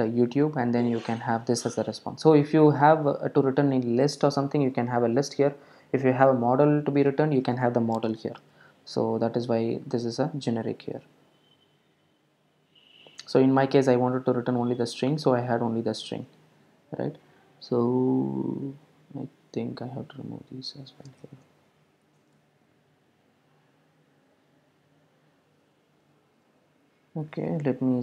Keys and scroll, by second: 22.4 super+s, 26.3 super+r.